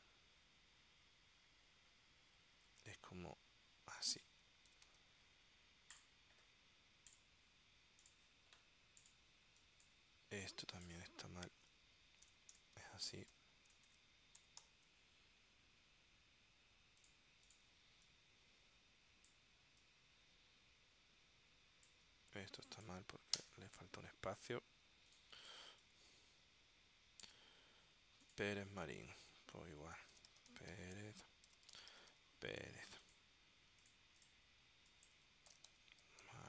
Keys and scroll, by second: 2.7 super+Tab, 4.6-5.5 typing, 9.6 space, 12.4-15.2 typing, 17.9 space, 23.5 space, 25.7 space, 29.0 super+f, 30.0-32.7 typing, 35.4-36.4 typing.